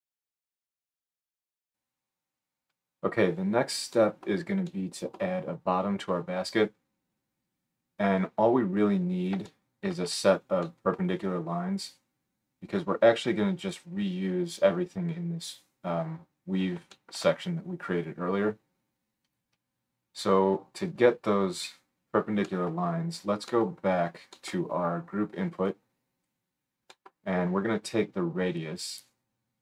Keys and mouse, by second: 2.1-11.9 drag, 11.9 middle click, 12.6-29.6 drag.